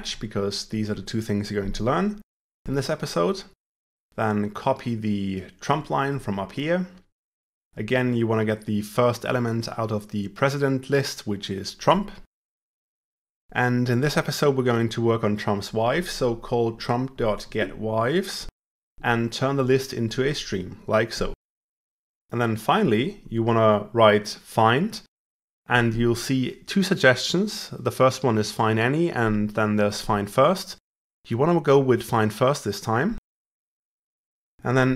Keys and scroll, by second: 5.3 ctrl+c, 7.4 ctrl+v, 34.3 ctrl+w.